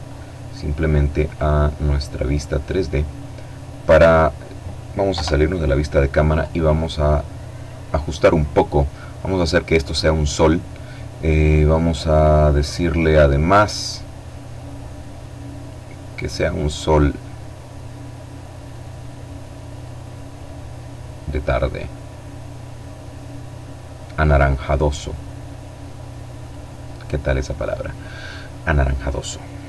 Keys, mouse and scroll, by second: 0.1 click, 1.2 click, 2.8-3.3 scroll down 2, 3.9 KP_0, 5.2 right click, 8.0 click, 14.4 click, 17.5 click, 18.1-19.1 drag, 19.7-20.5 scroll down 1, 20.5-21.9 scroll down 1, 21.9-22.8 scroll up 1, 23.4 click, 25.2 click, 29.0 F12.